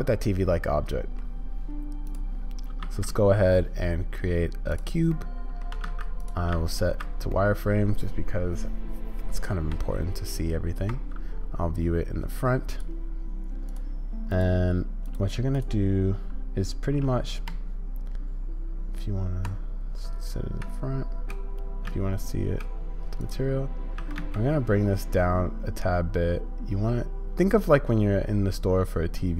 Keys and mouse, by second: 2.0 click, 5.1-5.6 middle drag, 7.3-9.2 drag, 13.7 click, 14.3 click, 15.1 click, 20.6 z, 21.9 z, 24.0 s.